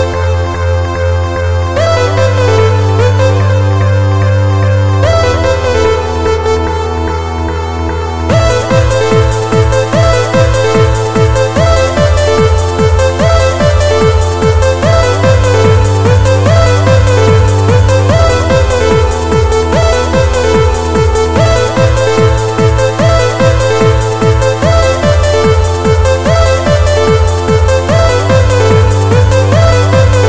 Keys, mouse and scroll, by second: 0.2 scroll up 1, 1.7 scroll up 2, 1.8 middle click, 12.6 click.